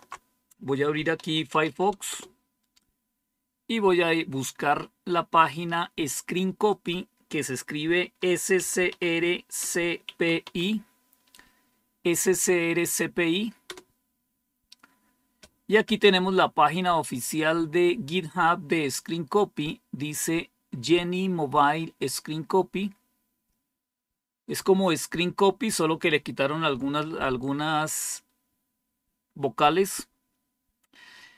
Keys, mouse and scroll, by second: 0.8-2.0 typing, 4.0-4.8 typing, 6.6 click, 7.1 click, 7.8-10.8 typing, 13.5 Return, 19.5 click, 19.8 click, 30.0-31.1 scroll down 4.